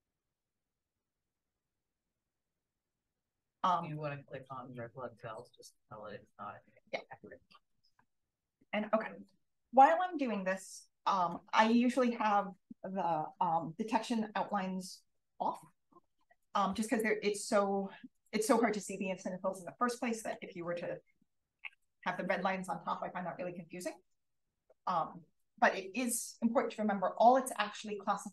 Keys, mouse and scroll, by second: 1.6 click, 2.5 click, 3.7 click, 4.7 click, 5.6 click, 7.2 d, 8.0 d, 11.2 d, 16.8 d, 17.9 d, 20.2-22.1 typing.